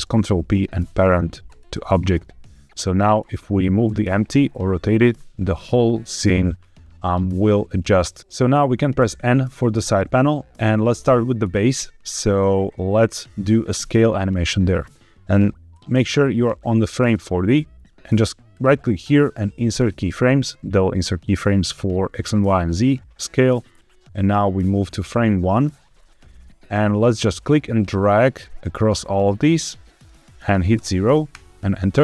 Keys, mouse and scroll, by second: 3.0 click, 3.7 g, 4.2 Escape, 8.9 n, 11.3-14.4 drag, 15.6-17.1 drag, 18.4-19.8 right drag, 24.1-25.6 drag, 26.9-31.2 drag.